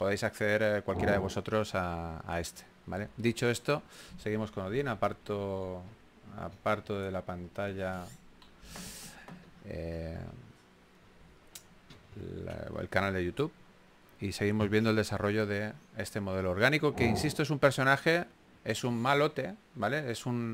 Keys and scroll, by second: 5.3 s, 6.7-8.8 typing, 11.5 s, 12.1 super+z, 13.9 s, 16.7 2, 19.3 super+z.